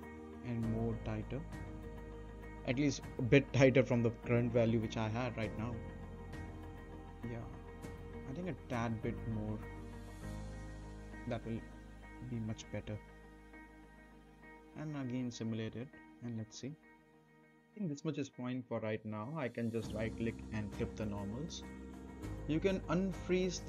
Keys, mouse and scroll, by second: 0.2-2.7 right drag, 2.6 space, 7.3 space, 7.6-8.6 right drag, 9.5 click, 10.5 Left, 13.0-14.6 right drag, 14.4 space, 18.3 space, 18.7-20.3 right drag, 20.9 click, 21.4 right click.